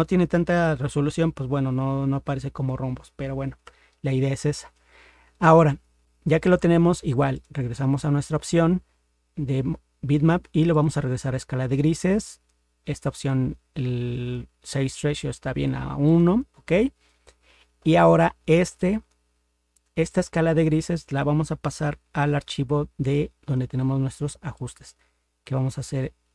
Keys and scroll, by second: 3.6 ctrl+0.